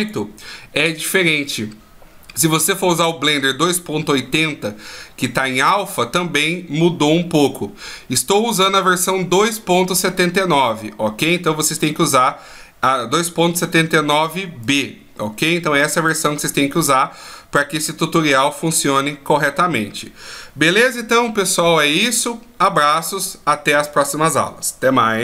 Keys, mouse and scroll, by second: 14.2 click.